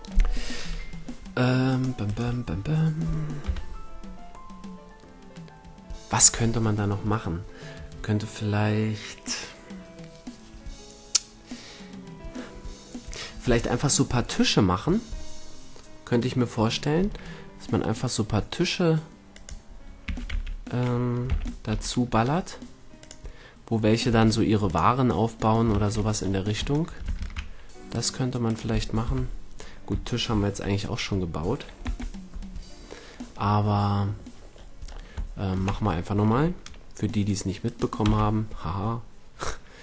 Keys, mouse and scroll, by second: 1.7-3.4 right drag, 3.4 KP_1, 19.3-21.1 drag, 20.1 a, 20.3 a, 21.3 m, 23.0-25.2 drag, 24.1 a, 25.7 shift+c, 27.1 shift+a, 29.0 KP_1, 31.8 KP_5, 34.5-37.1 middle drag, 35.7 Tab, 37.6-39.4 right drag, 38.0 x.